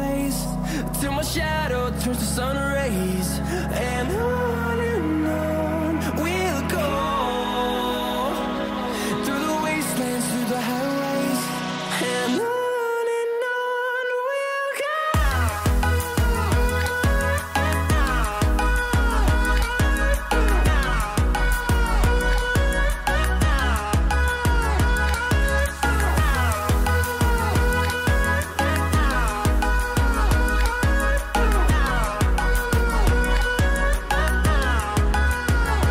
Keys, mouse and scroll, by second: 4.4-8.4 drag, 9.1 scroll down 1, 13.7-26.9 drag, 29.3 click, 30.2-30.8 scroll up 1, 30.9 scroll up 1, 34.1 scroll up 1.